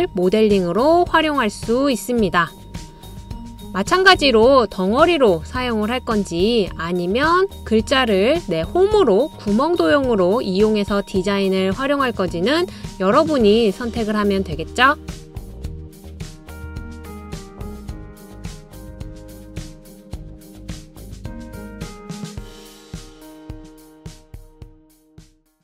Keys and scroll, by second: 0.2 super+v.